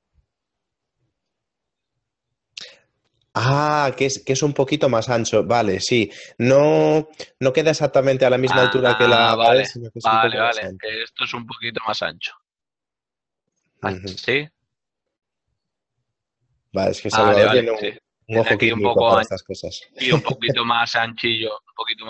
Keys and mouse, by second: 7.3 middle click, 10.7 click, 10.9 g, 11.7 click, 12.9 Tab, 13.3 click, 15.1 middle click, 15.7 shift+middle click, 16.0 middle click, 16.8 ctrl+middle click, 18.6 middle click.